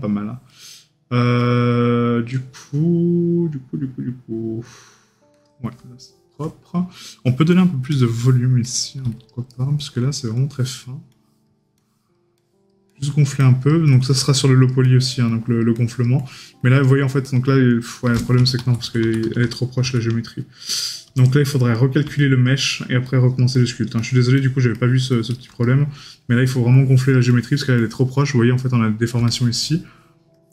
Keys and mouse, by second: 0.6 right click, 4.7 right click, 6.1 right click, 9.6 right click, 17.1 right click, 21.8 right click, 25.7 right click, 28.6 right click.